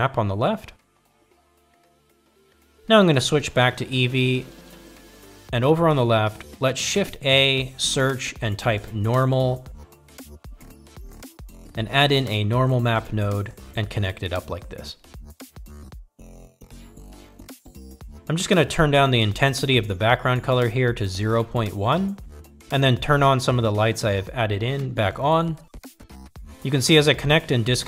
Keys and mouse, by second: 3.6-4.4 drag, 8.6 click, 9.4 shift+a, 15.7-16.9 drag, 17.9-18.8 drag, 21.0-23.6 drag, 24.7-25.3 drag, 25.6-26.0 drag, 26.4-26.9 drag, 27.7 middle click.